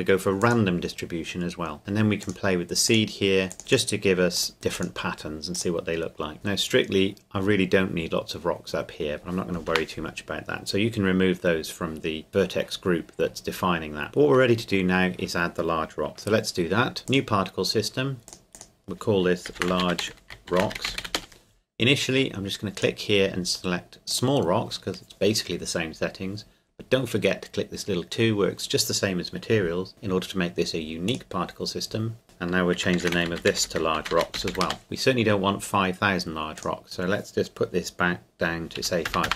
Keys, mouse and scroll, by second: 0.4 click, 2.2 click, 6.3-8.4 scroll down 2, 9.7 KP_0, 12.3-14.0 scroll down 1, 16.1 click, 17.1 click, 19.5-21.0 typing, 21.1 Return, 22.8 click, 31.1 click, 33.0-34.5 typing, 34.6 Return, 36.6 click, 38.8 KP_5, 39.1 KP_0.